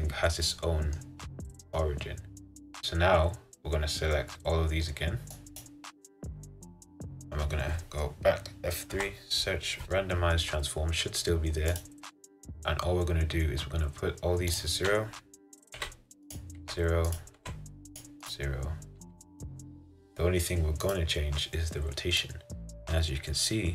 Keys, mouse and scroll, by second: 1.2-1.6 scroll down 2, 1.9-5.7 middle drag, 5.7 click, 6.3-11.9 middle drag, 11.9 F3, 16.4-23.7 drag.